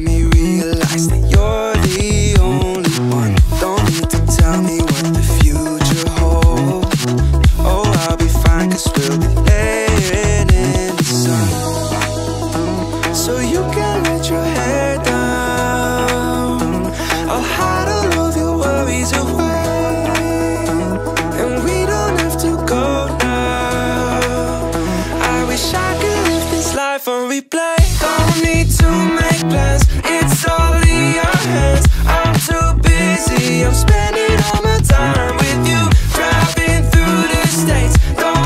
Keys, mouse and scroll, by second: 1.3 click, 2.1 click, 2.8-3.9 drag, 4.5 click, 6.8 click, 8.1-9.3 drag, 10.3 click, 10.7 ctrl+a, 12.1 shift+a, 14.8 click, 16.0 click, 17.9-19.0 drag, 20.6 click, 22.3-23.1 right drag, 23.4 ctrl+a, 26.0-27.1 drag, 27.9 drag, 28.4 scroll up 2, 29.1 shift+a, 32.0 click, 34.1-35.1 drag, 36.7-38.1 drag.